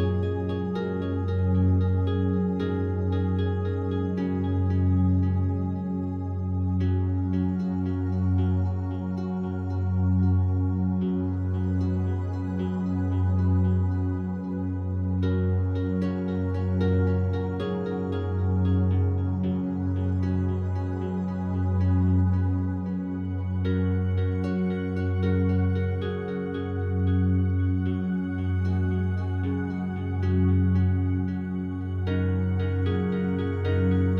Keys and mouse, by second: 0.5 Page_Down, 0.7 Page_Down, 1.8-14.3 drag, 14.8 Delete, 15.7 Escape, 16.4 Delete, 17.0 click, 19.1-20.7 drag, 20.7 Delete, 21.4 click, 23.3 Tab, 29.0 shift+s, 29.9-30.7 drag, 31.2-32.1 drag, 32.7 click, 33.2 click.